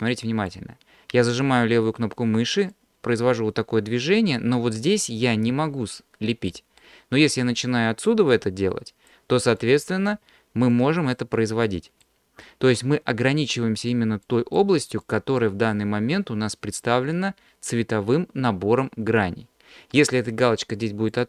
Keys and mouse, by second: 2.7-6.5 drag, 6.8 middle click, 8.3 click, 9.6 click, 10.7 click, 11.6 click, 12.4 middle click, 13.4 click, 14.3 click, 15.0 click, 15.7 middle click, 21.1 click.